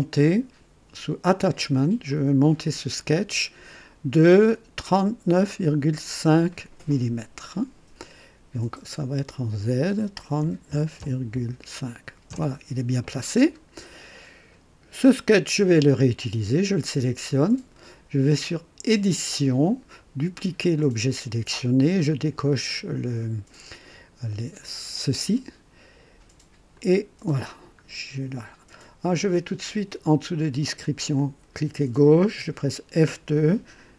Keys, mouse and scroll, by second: 2.1 click, 6.0-6.3 scroll up 1, 6.5 right click, 8.9 click, 10.4 KP_3, 10.7 KP_9, 11.0 KP_Decimal, 11.3 KP_5, 12.3 KP_Enter, 13.3 typing, 15.8 click, 18.9 click, 20.7 click, 24.6 click, 26.7 click, 27.9 scroll down 1, 31.1 click, 32.9 F2, 33.8-33.9 typing.